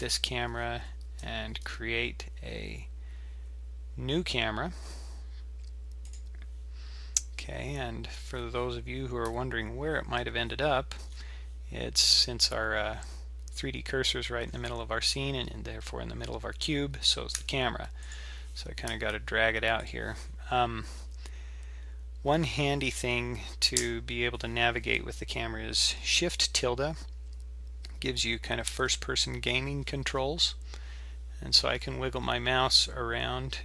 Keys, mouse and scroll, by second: 1.1 shift+a, 9.2 KP_7, 10.2 KP_5, 11.1-11.8 scroll up 8, 14.4-15.1 scroll down 6, 17.3 g, 18.9 g, 21.5-21.8 scroll up 2, 22.2-22.7 scroll down 2, 23.6 scroll down 1, 23.8 KP_0.